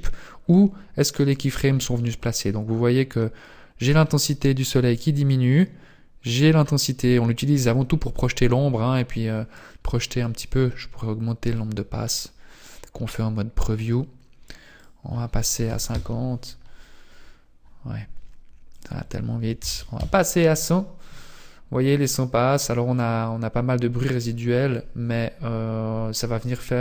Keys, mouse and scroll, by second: 2.3 click, 5.1 click, 9.2 scroll up 2, 11.5 click, 12.1-12.5 scroll down 6, 13.8 click, 14.9 click, 18.7 click, 19.7 KP_0, 19.9 KP_0, 21.6 scroll up 2.